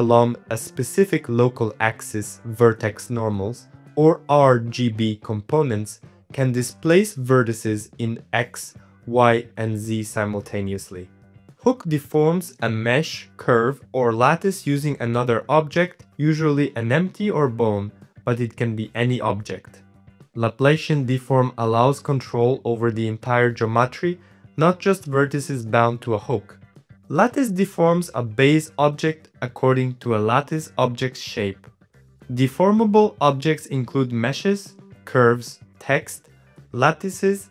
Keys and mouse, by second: 2.6-4.1 shift+drag, 4.6-7.4 shift+drag, 7.8 middle click, 8.3 middle click, 8.9 shift+middle click, 9.4 shift+click, 10.0 shift+middle click, 13.1 click, 13.6 middle click, 14.2 middle click, 14.4 g, 15.4 g, 16.2 g, 16.4 s, 16.8 middle click, 17.1 r, 17.7-18.8 middle drag, 18.9-20.6 middle drag, 20.8 middle click, 21.2 click, 21.4 shift+middle click, 21.6 g, 24.1 click, 24.4 g, 25.2 g, 25.7 middle click, 26.3-29.2 typing, 26.9 middle click, 27.4 middle click, 30.3 middle click, 30.4 middle click, 30.7 KP_7, 30.9 s, 31.5 KP_1, 31.8 click, 32.3 middle click, 32.4 middle click, 32.6 Tab, 32.8 Tab, 32.8 click, 33.3 click, 33.5 middle click, 34.1 Tab, 34.1 click, 34.1-37.1 typing, 34.6 click, 35.1 click, 35.6 middle click, 36.1 middle click, 37.4 middle click.